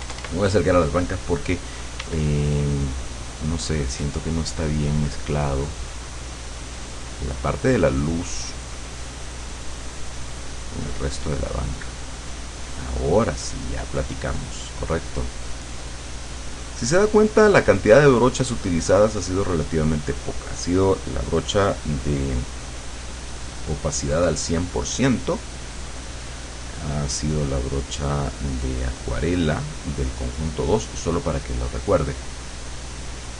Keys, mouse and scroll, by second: 0.4 middle click, 0.6 click, 2.1 d, 2.5-15.9 drag, 31.3 click, 33.1 click.